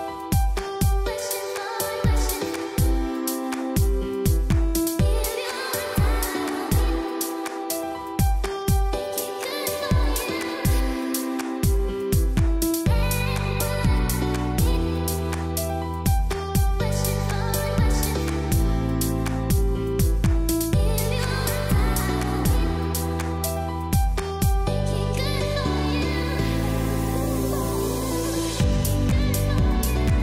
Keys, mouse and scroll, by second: 0.0-2.2 typing, 0.3 click, 0.6 click, 1.2 click, 3.8-5.5 typing, 5.7 click, 6.6 typing, 7.9-9.0 typing, 8.0 click, 10.5 typing, 10.7 click, 11.9-12.6 typing, 12.2 click, 14.5-16.6 typing, 17.3 click, 17.6 ctrl+m, 18.8 click, 22.3 b, 23.9 click, 24.5-26.0 typing, 25.8 click, 27.2-30.2 typing, 27.8 click, 29.0 click, 29.9 click.